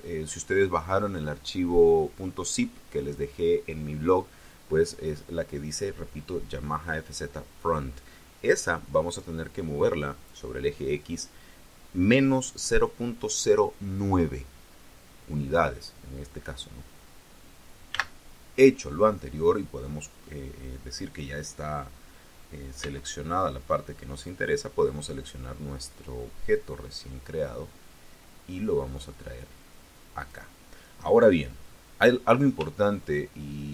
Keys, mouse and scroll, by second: 17.8 n, 22.7 b, 23.3-24.3 drag, 26.4-30.3 drag, 31.5 middle click, 32.7 shift+click, 33.3-33.7 shift+middle drag.